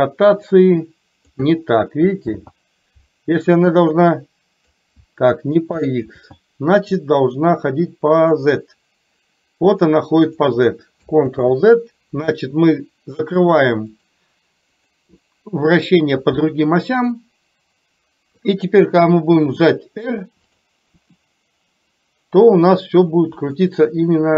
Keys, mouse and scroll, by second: 0.5 click, 2.5 ctrl+z, 3.9 click, 6.2 ctrl+z, 8.4-10.5 drag, 11.4 ctrl+z, 13.5 click, 14.0 click, 14.9 click, 17.3-18.5 middle drag, 19.2 r, 21.0 r.